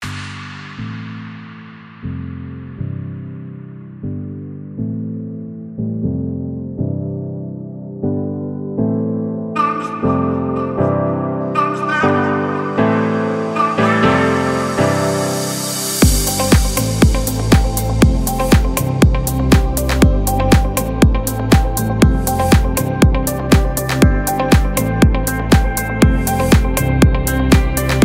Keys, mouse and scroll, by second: 3.0 alt+scroll up 1, 3.9 click, 7.3 click, 9.2-11.5 drag, 11.5-14.4 alt+drag, 15.6-17.0 alt+drag, 17.0 space, 17.1 click, 17.5 space, 18.1 click, 19.8-22.6 shift+drag, 22.6 space, 22.7 click, 23.1 space, 23.7 shift+click.